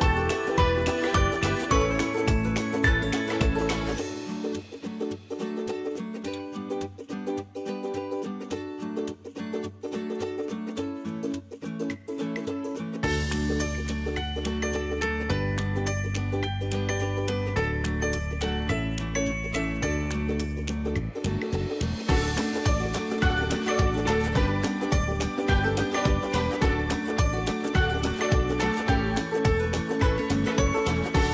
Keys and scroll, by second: 31.1 Delete.